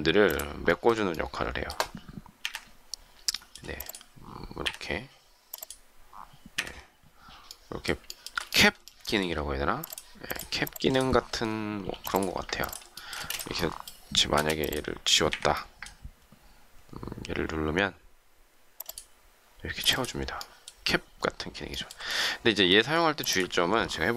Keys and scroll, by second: 2.3 Delete, 4.6 Delete, 6.4 Delete, 14.3 shift+space, 15.2 Delete.